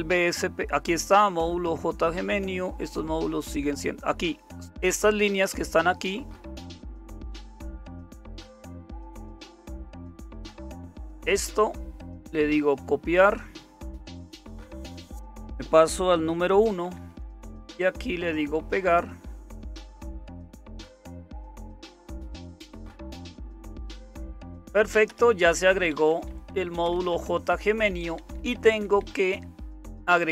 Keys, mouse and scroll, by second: 0.3-1.0 scroll down 1, 1.0-1.8 scroll down 1, 1.8-2.8 scroll down 1, 2.8-5.2 scroll down 1, 16.8 super+1, 25.1 Return, 25.9 Up, 26.1 Up, 26.3 Up, 26.5 Up, 26.7 Up, 28.2 Right, 28.3 Right, 28.5 Right, 28.7 Right, 28.8 Right, 30.0 Up, 30.0 Right.